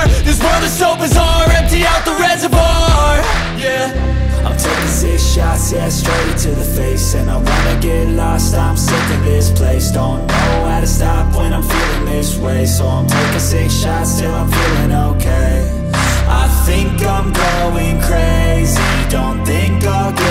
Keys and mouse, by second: 1.0 middle click, 7.1 click, 9.7 click, 9.8-11.4 middle drag, 11.9 click, 15.8 click, 17.1 middle click, 18.3 click.